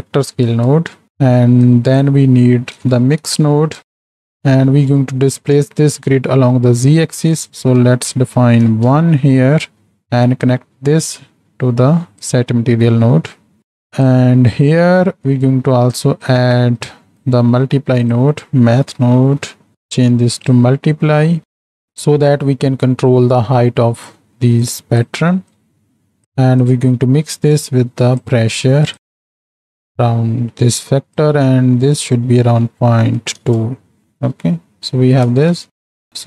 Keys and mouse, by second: 1.7-4.1 drag, 4.8 middle click, 7.3-9.6 drag, 9.6 middle click, 10.4 click, 10.6-12.4 drag, 13.0 middle click, 13.6 click, 15.5 click, 16.3 drag, 16.8 click, 17.8 shift+a, 20.5-21.9 drag, 24.6 click, 25.6-26.2 drag, 26.8-28.4 drag, 28.9 click, 30.8 click, 31.8-33.4 drag, 34.0 middle click, 34.6 middle click.